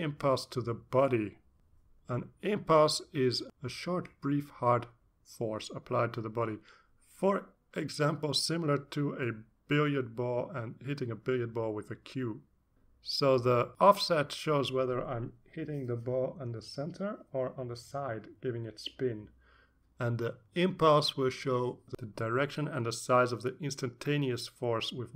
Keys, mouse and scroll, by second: 0.9 click, 1.9-4.1 drag, 4.8-6.6 drag.